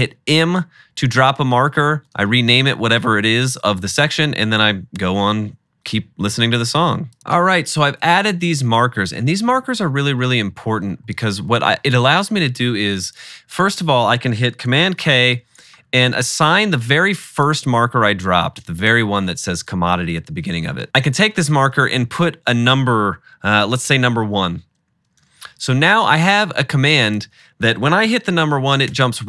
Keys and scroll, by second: 7.2 typing, 8.7 super+s, 15.0 super+k, 24.3 1, 25.4 super+k, 29.0 1.